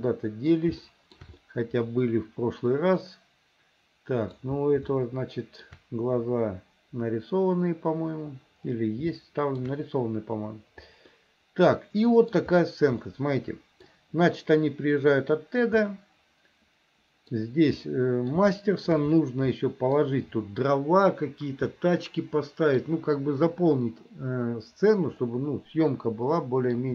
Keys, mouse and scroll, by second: 0.0 middle click, 0.9 shift+middle click, 1.6-4.4 middle drag, 5.0 shift+middle click, 9.2 shift+middle click, 11.2-12.4 middle drag, 13.1 middle click, 15.9-17.4 middle drag, 17.9 middle click, 18.6 shift+middle click, 19.6 middle click, 21.8-22.9 middle drag, 25.3-26.9 middle drag.